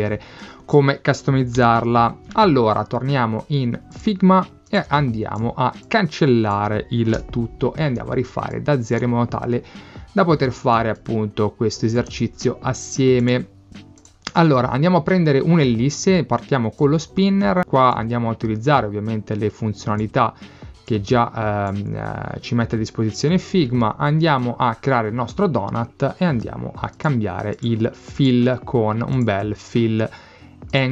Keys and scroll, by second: 1.6 Escape, 4.9 space, 7.2 BackSpace, 8.0 space.